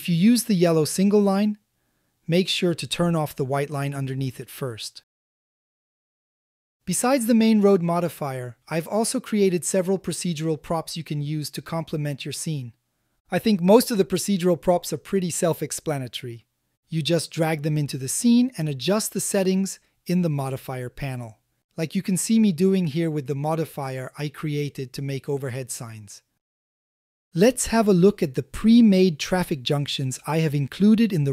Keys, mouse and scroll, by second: 3.3 click, 5.1 click, 10.1-11.3 drag, 11.8-12.2 shift+middle drag, 12.4 a, 12.5 a, 13.4-14.1 drag, 14.7-15.5 drag, 16.6-18.1 drag, 18.6-20.5 drag, 21.0-23.7 drag.